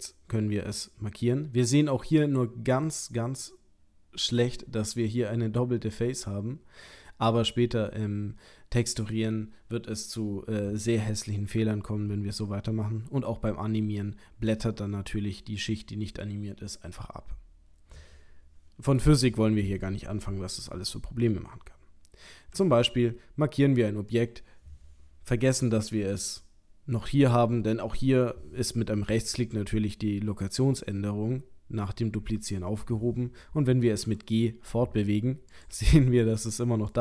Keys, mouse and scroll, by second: 2.6-5.0 scroll up 7, 6.4-8.0 scroll down 9, 7.6-8.1 scroll up 2, 10.2 scroll up 1, 22.6 shift+d, 34.0 g, 36.3 g.